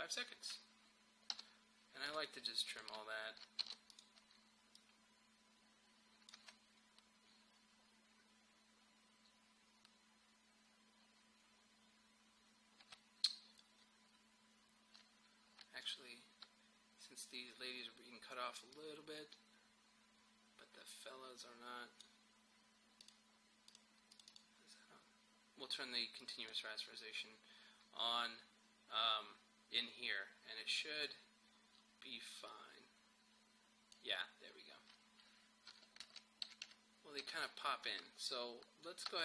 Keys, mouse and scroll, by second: 1.3 n, 2.1 click, 2.7 shift+click, 3.6 alt+], 3.9-6.4 drag, 6.4 space, 12.9 space, 15.9 click, 18.8-23.1 drag, 27.4-27.9 scroll down 1, 27.9-29.7 scroll up 1, 31.0-35.7 drag, 35.7 Page_Down, 36.5 Page_Up, 37.3 Page_Down.